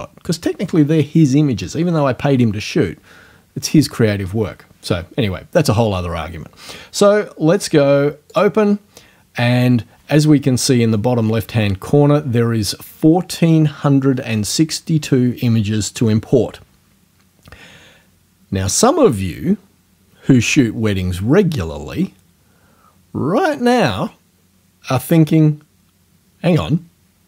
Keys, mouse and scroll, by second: 8.3 click.